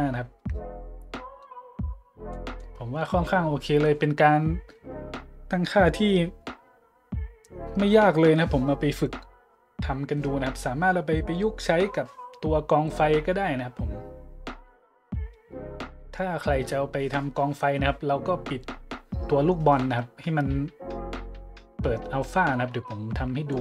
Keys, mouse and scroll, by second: 0.0 middle click, 1.7 middle click, 2.3-2.6 middle drag, 23.5-23.6 drag.